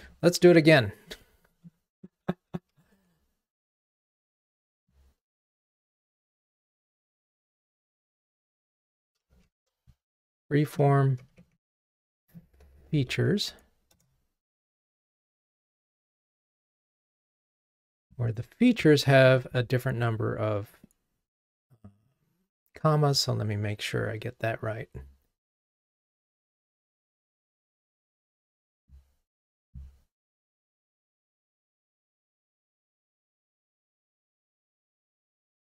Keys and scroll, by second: 3.1 ctrl+Tab, 8.3 super+d, 9.4 alt+shift+Down, 14.0 Return, 26.1 super+1.